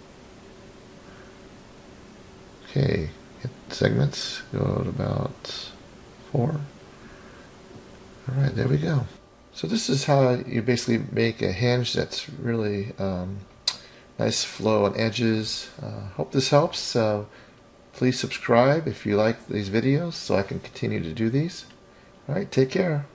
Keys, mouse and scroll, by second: 2.6 click, 2.9 click, 3.1 click, 5.5 click, 5.9-6.7 scroll down 1, 6.7-7.3 middle drag, 6.7 scroll down 2, 8.1-8.5 drag, 9.1-13.3 middle drag, 18.6 click, 20.5-20.9 scroll up 3, 21.5-21.9 scroll down 3.